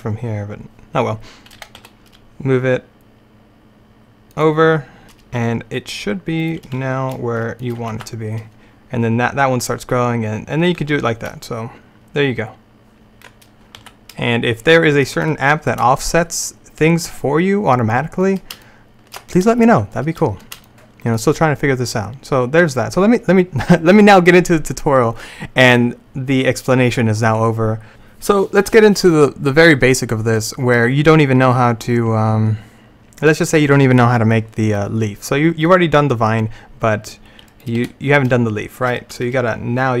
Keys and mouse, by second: 1.6 g, 6.5-8.6 drag, 6.8 e, 8.0 alt+a, 10.9 a, 12.1 middle click, 13.9 alt+a, 18.7 middle click, 18.9-20.9 middle drag, 22.8-37.6 middle drag, 37.6-40.0 right drag, 37.9 h.